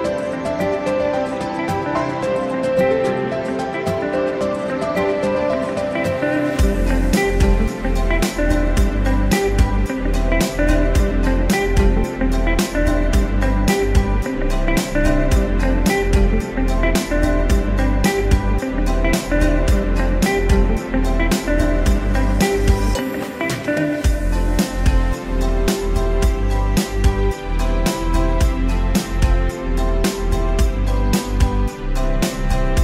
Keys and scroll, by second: 22.9 ctrl+shift+j.